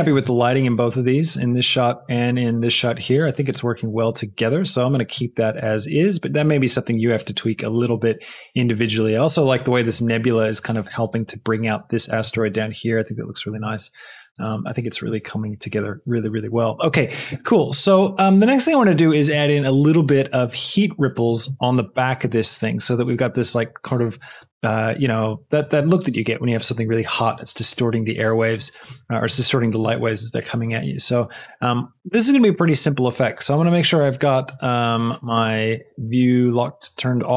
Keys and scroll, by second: 0.1 space, 14.1 space.